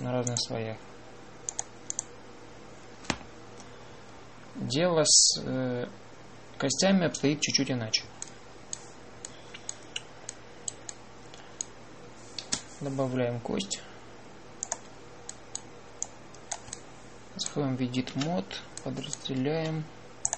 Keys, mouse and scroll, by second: 13.3 shift+a, 19.0 Tab.